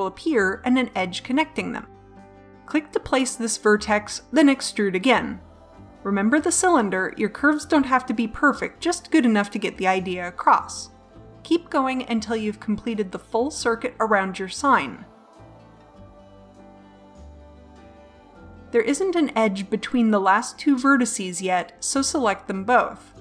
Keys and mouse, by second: 3.9 middle click, 4.9 e, 6.6 e, 8.5-14.9 typing, 16.0 e, 16.2 e, 16.7 e, 17.4 e.